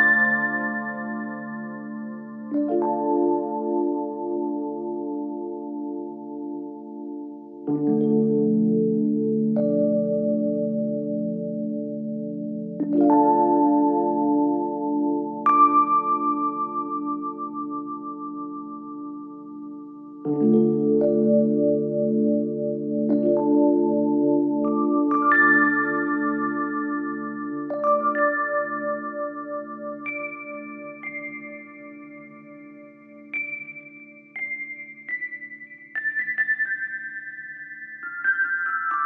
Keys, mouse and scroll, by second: 8.0-12.2 drag, 12.2 Return, 13.5 z, 16.5 alt+click, 30.1 click, 32.1-39.0 drag.